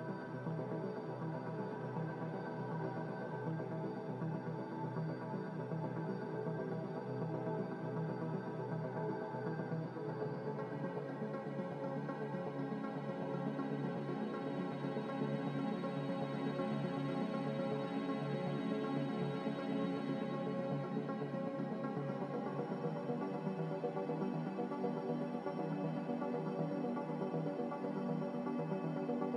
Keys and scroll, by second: 18.6 m, 23.3 a.